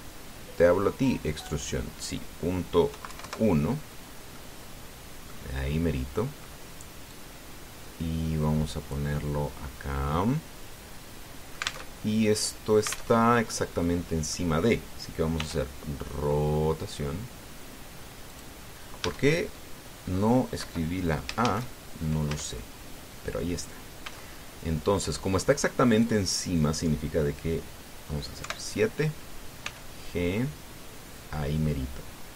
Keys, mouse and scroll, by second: 0.5-1.0 scroll up 4, 2.1 click, 3.7 KP_Decimal, 3.9 KP_1, 4.0 KP_Enter, 5.1-6.2 drag, 6.5 middle click, 7.9-9.9 drag, 12.3 alt+click, 12.7 alt+Tab, 13.8 alt+Tab, 14.3 scroll down 2, 14.6 click, 16.1 r, 19.1 click, 19.8 Tab, 21.4 Home, 22.2 shift+a, 23.0 Tab, 24.8 s, 26.7 click, 29.2 KP_7, 30.4 g.